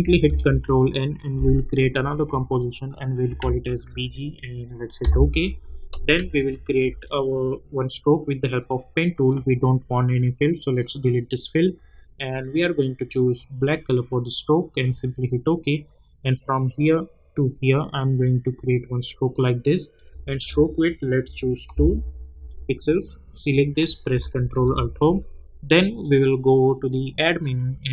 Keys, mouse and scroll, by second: 0.0 click, 0.2 ctrl+n, 3.0-3.9 typing, 5.0 Return, 7.0 click, 9.3 click, 19.9 click, 21.7 Return, 22.5 click, 24.5 ctrl+alt+Home, 26.0-27.9 drag.